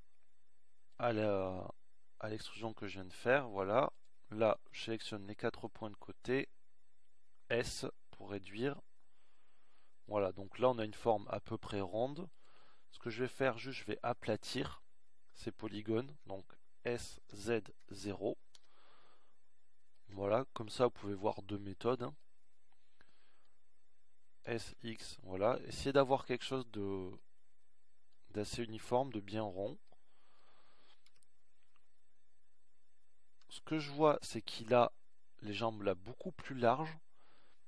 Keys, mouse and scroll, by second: 0.7 s, 10.6 s, 16.7-18.9 shift+right drag, 20.1 s, 27.8 s, 34.5 KP_1, 36.9 z.